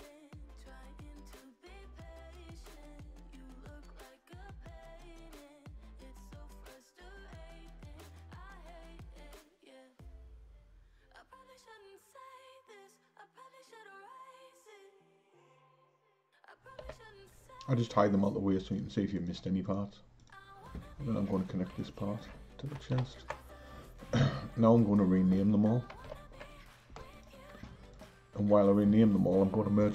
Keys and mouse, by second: 0.6 h, 1.3 click, 1.8 h, 2.4 click, 3.2 Tab, 3.5 click, 6.7 click, 9.2-11.0 drag, 11.0 l, 11.5 l, 12.6 p, 14.9 Tab, 15.4 click, 16.9 h, 19.2 click, 20.2 click, 21.8 shift+click, 23.0 ctrl+j, 26.1 alt+h, 27.1 click, 27.9 click.